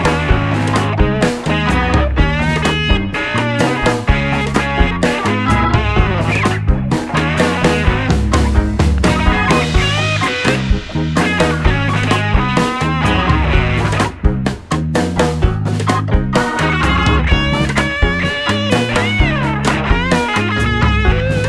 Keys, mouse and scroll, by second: 0.8-5.0 middle drag, 4.6 w, 9.4 click, 12.3 click, 13.7 o, 20.2 w.